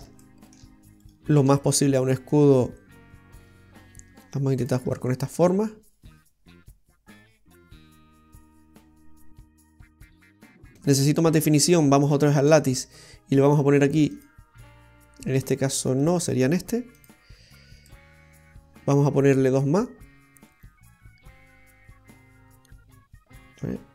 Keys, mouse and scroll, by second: 0.2 middle click, 1.1 shift+right click, 1.4 shift+right click, 2.4 click, 5.0 middle click, 12.5 click, 14.2 click, 16.1 click, 17.0 click, 17.9 middle click.